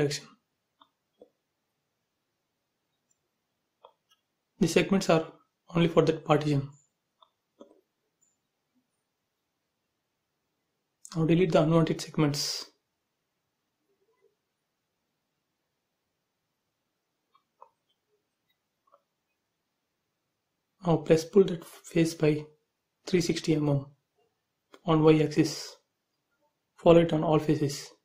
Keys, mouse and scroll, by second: 0.0 shift+', 0.2 Return, 1.2 x, 1.6 x, 2.1 Return, 2.6 space, 3.6-4.1 scroll up 1, 4.2-4.6 scroll up 1, 4.8 e, 5.1 click, 5.8 scroll down 1, 7.5 click, 9.4 scroll up 1, 10.1 click, 11.5 scroll down 1, 12.1 shift+middle click, 12.6 scroll up 1, 13.2 click, 14.8-15.1 scroll down 1, 16.4 space, 16.6 scroll down 1, 17.6-19.4 middle drag, 19.4-19.8 scroll down 1, 19.9 shift+middle click, 21.5-24.1 typing, 21.8 click, 24.4 click.